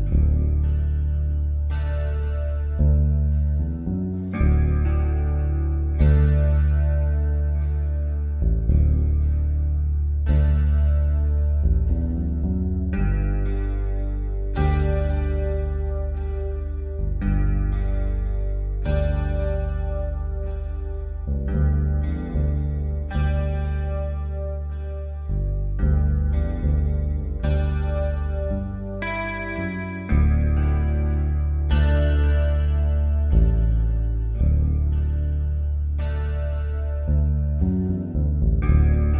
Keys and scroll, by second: 0.6 Up, 1.5 Down, 2.8 Up, 10.6-11.5 typing, 18.7 ctrl+t, 22.0 Return, 29.8 space, 33.0 space, 34.7 p, 38.4-39.1 typing.